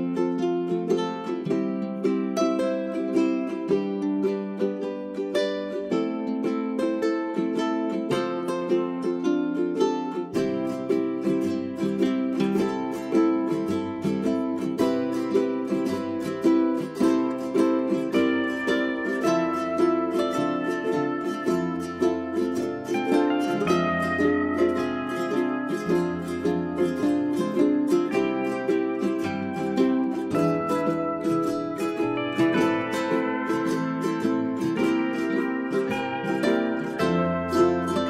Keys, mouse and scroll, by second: 1.2 Delete, 1.7 typing, 3.1 click, 5.2 ctrl+a, 5.4 ctrl+a, 5.7-19.8 drag, 19.8 space, 20.5 click, 20.9 right click, 22.8 1, 23.3-30.6 drag, 30.8 right click, 31.0-38.0 drag.